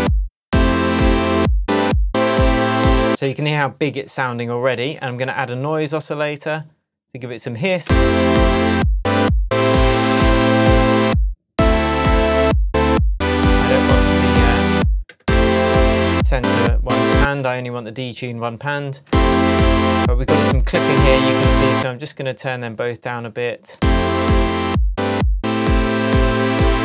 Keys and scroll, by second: 3.0 space, 7.8 space, 13.7 0, 17.1 space, 19.0 space, 21.7 space, 23.7 space.